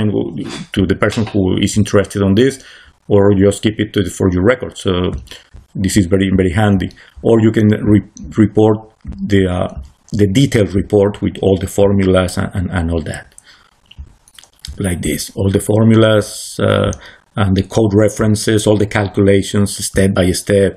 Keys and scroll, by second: 5.5 c.